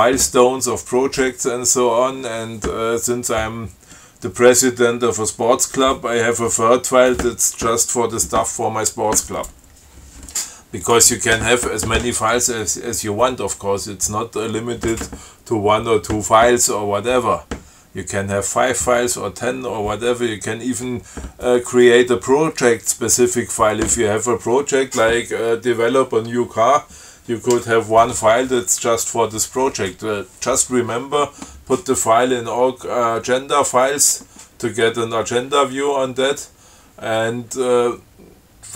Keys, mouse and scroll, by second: 11.1 click.